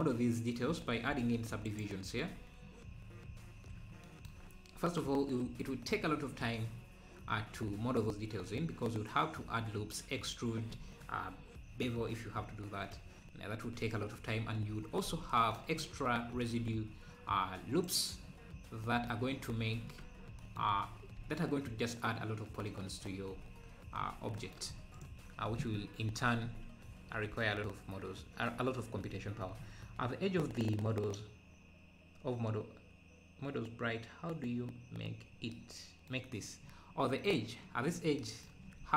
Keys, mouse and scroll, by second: 2.2-2.5 scroll up 3, 2.7-3.2 scroll down 4, 5.0 scroll up 1, 14.2 Tab, 14.4-14.7 scroll down 3, 15.1 Tab, 16.3 ctrl+r, 19.3 scroll down 2, 20.0 Tab, 20.8-22.6 scroll up 2, 23.0-23.3 scroll up 2, 24.0-24.7 scroll down 3, 25.0 Left, 36.3 click, 36.6 scroll up 4.